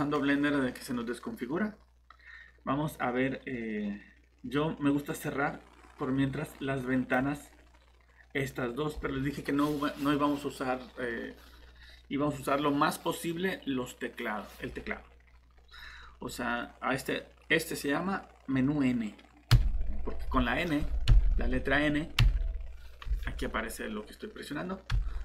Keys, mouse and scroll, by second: 5.2 click, 19.5 n, 21.1 n, 22.2 n, 23.0 n, 24.9-25.2 typing.